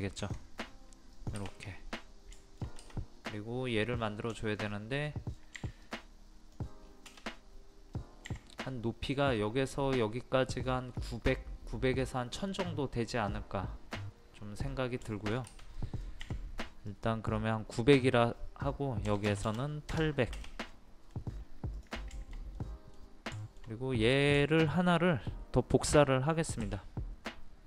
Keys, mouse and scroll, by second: 0.2 click, 1.6 scroll down 1, 1.7 scroll up 1, 1.9 scroll down 1, 2.4 shift+middle click, 4.4 shift+middle click, 5.9 click, 6.9 scroll up 1, 8.3 t, 14.7 scroll down 1, 15.2 shift+middle click, 15.5-15.8 scroll up 1, 15.8 middle click, 16.9-18.0 drag, 19.1 KP_8, 20.7 middle click, 21.4-21.8 scroll up 1, 21.8 click, 22.1 scroll up 1, 22.2 shift+middle click, 23.4 shift+middle click, 24.1 click, 24.5 shift+middle click, 26.7 m.